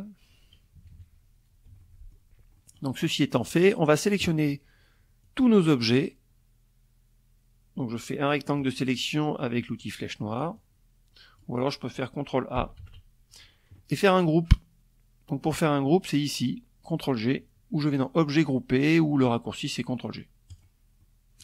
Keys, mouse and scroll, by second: 0.2 F1, 0.3 middle click, 1.1 click, 3.7-7.3 drag, 8.2 click, 8.8-10.1 drag, 11.3 ctrl+a, 16.5 click, 19.0 click, 19.5 click.